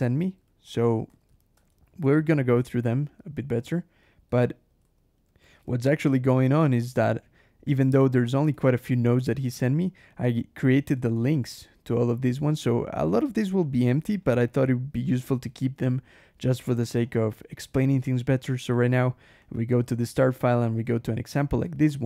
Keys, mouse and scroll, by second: 0.0 alt+j, 0.3 Return, 0.5 Escape, 1.3 h, 1.4 Escape, 1.5 j, 2.5 Return, 2.7 Escape, 3.2 h, 3.4 Escape, 3.9 j, 4.3 l, 4.7 Escape, 5.1 \, 5.7 ctrl+shift+h, 6.8 scroll down 1, 7.8 click, 8.0 Escape, 8.4 alt+h, 10.1 click, 10.4 Escape, 10.8 alt+Return, 11.0 Escape, 12.4-12.8 scroll down 1, 13.5 click, 14.0 click, 14.4 click, 14.9 click, 15.3-15.7 scroll up 1, 16.9 click, 17.6 click, 18.6 click, 19.3 click, 19.6 Escape, 19.7 k, 20.8 h, 21.5 alt+Return, 21.7 alt+Escape.